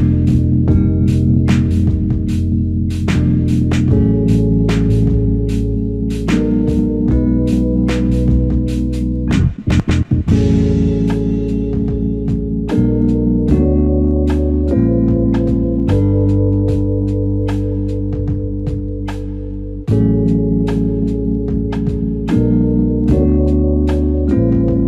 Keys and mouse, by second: 0.4 ctrl+alt+click, 9.5 alt+click, 10.3 ctrl+alt+click, 13.7 double click, 19.2 shift+click, 22.3 ctrl+alt+click, 22.9 alt+click.